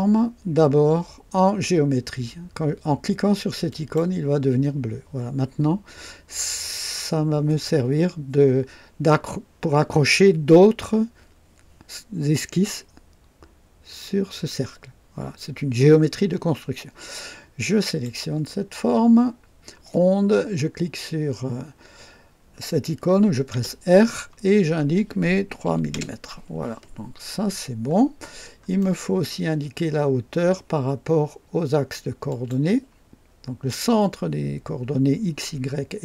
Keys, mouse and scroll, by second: 3.7 click, 17.8 click, 23.5 r, 23.5 r, 25.6 KP_3, 25.9 KP_Enter, 27.4 scroll up 2, 28.3 scroll down 2, 28.8-29.5 right drag, 32.3 click.